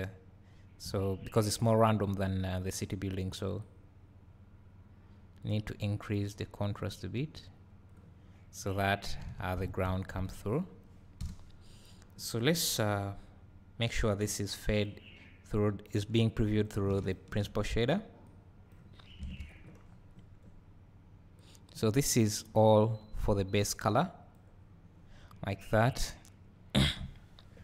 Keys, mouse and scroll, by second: 0.0 click, 1.0-2.8 scroll up 2, 2.8-3.8 scroll up 1, 3.8-17.2 drag, 8.2-9.0 scroll down 2, 10.2 KP_Decimal, 11.2 KP_0, 11.9-13.5 scroll down 2, 13.5-14.9 scroll down 1, 18.3-27.6 drag.